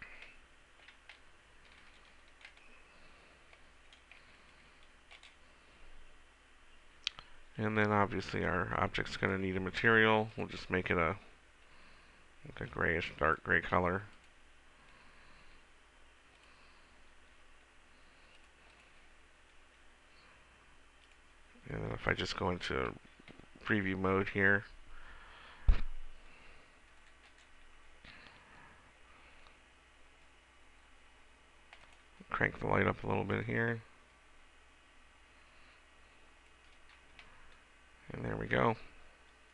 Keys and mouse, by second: 0.6-5.2 middle drag, 5.2-7.8 drag, 9.3-12.4 drag, 16.5 click, 21.2 click, 27.5-29.2 right drag.